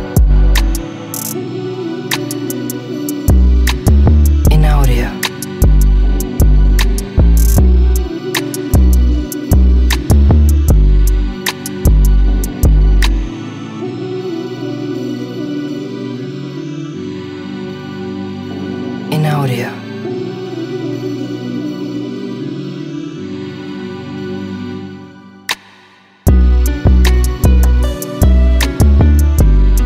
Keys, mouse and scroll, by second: 3.0 shift+click, 4.9 shift+click, 5.2 shift+click, 5.7 shift+click, 7.8 shift+click, 8.2 shift+click, 8.6-9.6 middle drag, 10.5-12.1 drag, 13.1 n, 13.8 click, 14.4-15.6 drag, 16.5 n, 17.1 s, 18.7 click, 20.2 Tab, 21.0 middle click, 21.5 Tab, 22.2 click, 22.6 middle click, 23.5 Tab, 25.7 f, 27.0-28.0 middle drag, 29.7 shift+middle click.